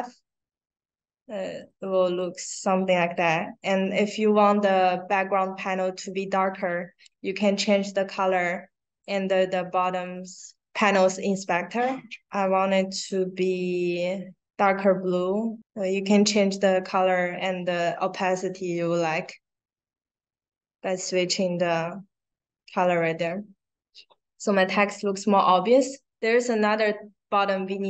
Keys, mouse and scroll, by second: 1.4-2.1 drag, 8.1 click, 9.9-13.0 drag, 13.6 click, 14.4-16.4 drag, 23.0 click, 24.7 click, 26.7 click.